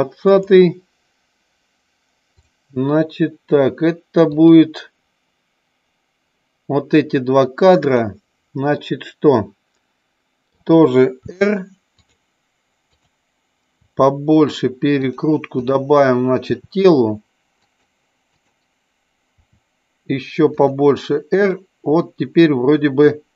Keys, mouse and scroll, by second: 0.2 click, 4.3 click, 7.7 click, 8.7-10.5 middle drag, 11.3 r, 11.9 click, 12.9 click, 13.7 r, 17.5 click, 18.3 click, 19.4 r, 20.5 click, 21.5-23.0 middle drag.